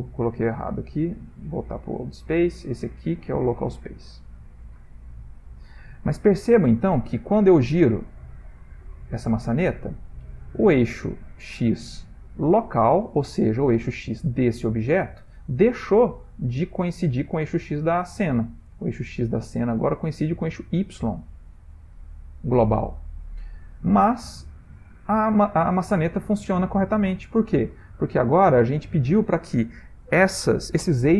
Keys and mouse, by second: 0.5 click, 3.2 click, 4.6 click, 7.0 click, 7.3 click, 8.0 r, 12.7-13.2 middle click, 13.0 middle click, 13.1 middle click, 14.8 shift+middle click, 15.0 middle click, 15.7 ctrl+middle click, 16.0-18.2 ctrl+middle click, 17.2 middle click, 17.5 middle click, 17.7 middle click, 17.8 middle click, 17.9 middle click, 18.1 middle click, 23.0 middle click, 24.1 ctrl+middle click, 25.6 middle click, 27.3 click.